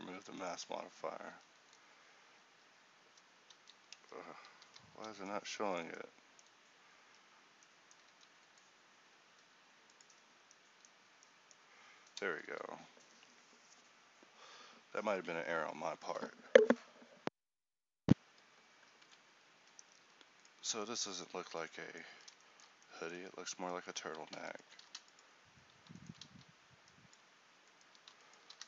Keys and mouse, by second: 1.4 z, 3.7 ctrl+z, 4.1 Tab, 4.7 a, 7.1 Tab, 8.2 a, 11.3-12.4 drag, 19.6 a, 22.2 Tab, 25.0 x, 26.4 x.